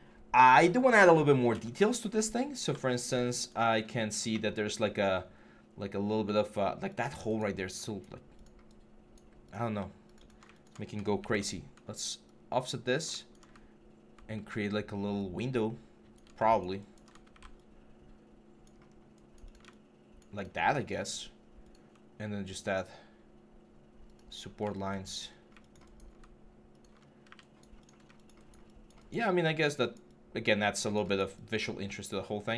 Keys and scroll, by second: 11.0 ctrl+e, 14.1 ctrl+e, 17.0 ctrl+e, 20.0 alt+3, 24.1 3, 25.1 3, 26.8 1.